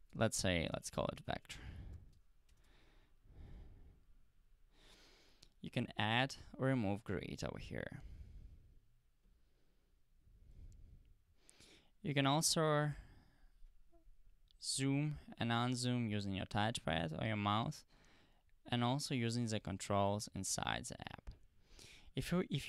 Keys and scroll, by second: 1.2-3.2 typing.